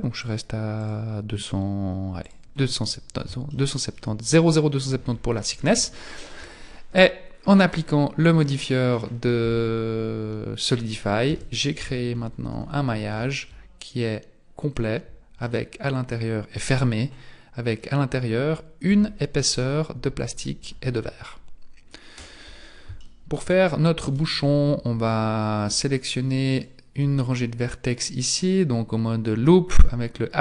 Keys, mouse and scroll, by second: 0.2 click, 0.8 click, 2.2 click, 2.7-3.5 scroll down 4, 3.5 shift+middle click, 5.3 scroll down 2, 5.9 shift+middle click, 8.3 click, 11.3 Tab, 11.7 a, 12.5 z, 13.1 a, 13.5 middle click, 15.5 middle click, 18.1-18.7 scroll down 1, 18.7 scroll down 2, 18.9 Tab, 19.9 KP_1, 20.9-21.3 scroll down 2, 22.1-22.6 scroll up 5, 23.0 shift+middle click, 23.6-24.1 scroll up 2, 24.3 Tab, 26.5 alt+right click, 27.2 middle click.